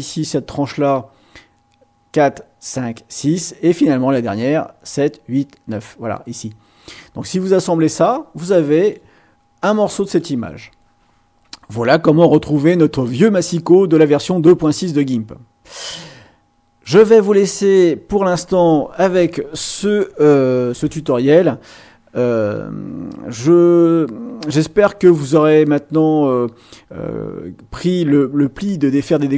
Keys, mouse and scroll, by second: 8.7 click, 10.0 click, 16.8 click.